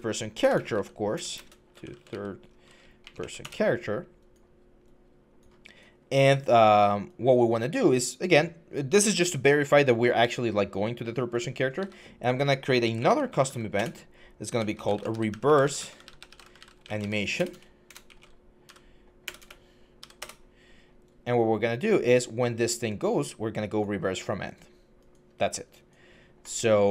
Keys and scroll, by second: 0.0-2.9 typing, 3.2 Return, 11.6 Tab, 12.6-13.3 typing, 13.6 Return, 14.3-20.3 typing.